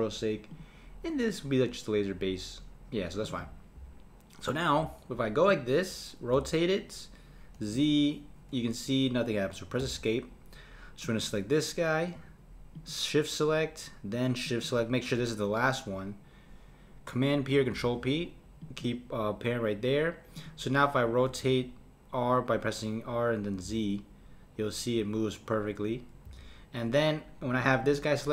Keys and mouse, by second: 3.2 click, 5.5 click, 6.3 r, 11.0 click, 12.7 shift+click, 14.4 shift+click, 17.7 p, 20.4 click, 21.3 r, 27.8 click.